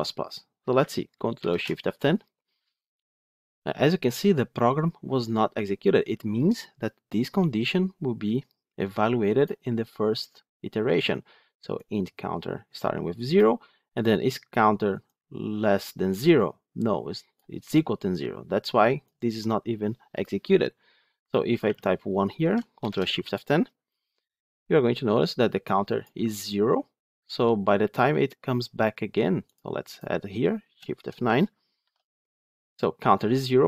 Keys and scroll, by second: 1.3 ctrl+shift+F10, 22.7 ctrl+shift+F10, 29.4 ctrl+F8, 31.7 shift+F9.